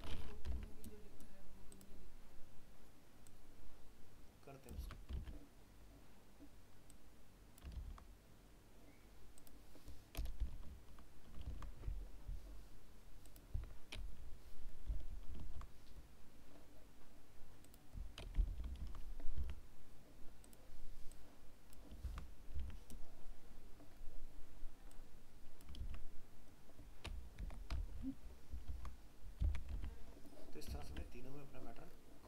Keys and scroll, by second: 0.5 alt+Tab, 4.8 ctrl+c, 5.2 alt+Tab, 7.7 ctrl+v, 11.5 ctrl+s, 15.4 ctrl+s, 18.8 ctrl+s, 19.4 alt+Tab, 22.0 ctrl+c, 22.6 alt+Tab, 25.8 ctrl+v, 29.8 alt+Tab.